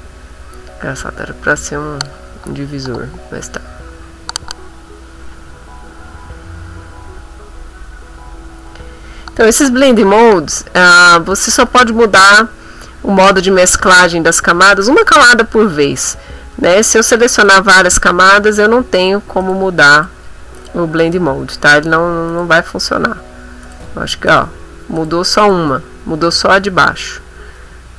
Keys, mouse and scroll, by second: 14.8 click, 17.5 shift+click, 18.0 shift+click, 19.0 click, 19.4 shift+click, 20.0 shift+click, 20.6 click, 21.0 click, 22.3 click, 23.6 click, 24.3 click, 25.0 click, 25.4 click.